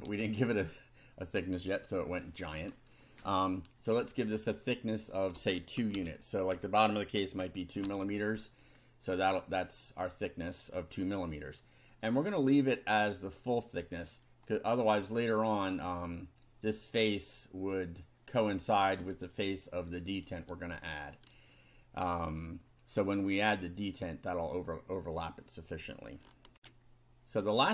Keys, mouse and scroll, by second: 1.4 click, 4.6 click, 5.4 space, 5.8 2, 6.0 space, 6.5 Down, 7.8 F5, 8.8 scroll up 2, 9.3 middle click, 9.9 click, 21.0 click, 26.6 ctrl+r.